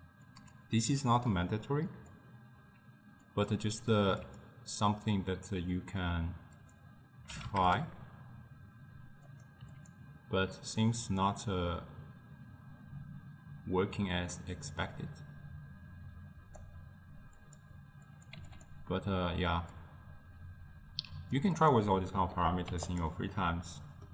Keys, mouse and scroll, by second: 3.3-4.6 drag, 6.6-10.2 drag, 11.3-14.9 drag, 17.4-18.9 drag, 19.8-23.3 drag, 23.4-24.1 middle drag.